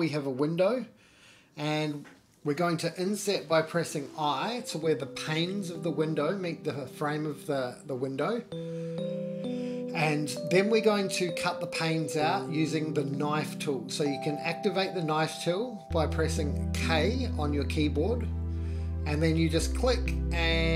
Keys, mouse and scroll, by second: 0.2 scroll down 1, 0.5 middle click, 0.9 Tab, 2.3 middle click, 3.0 i, 6.5 g, 12.5 middle click, 13.5 Tab, 14.0-14.7 middle drag, 14.8 Tab, 15.8 middle click, 19.6 k.